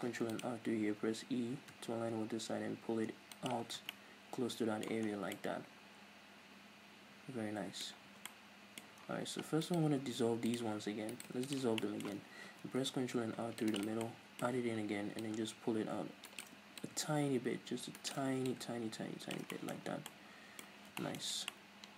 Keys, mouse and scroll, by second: 0.1 ctrl+r, 3.5 shift+click, 3.7 middle click, 3.7 scroll down 1, 3.8 Tab, 4.0-5.1 middle drag, 5.1 scroll down 2, 5.4-9.7 middle drag, 8.0 scroll up 2, 8.1 Tab, 8.9-9.7 scroll up 2, 9.7 alt+right click, 10.1 x, 11.2 alt+right click, 11.4 x, 11.9-13.8 middle drag, 12.5 ctrl+r, 13.8 click, 13.9 right click, 14.1-15.3 middle drag, 15.3-16.5 drag, 16.5 shift+right click, 16.9-18.2 drag, 18.4 shift+right click, 18.5-19.6 drag, 19.6-21.9 middle drag, 19.8 Tab, 20.0 scroll down 2, 20.9-21.6 scroll down 4.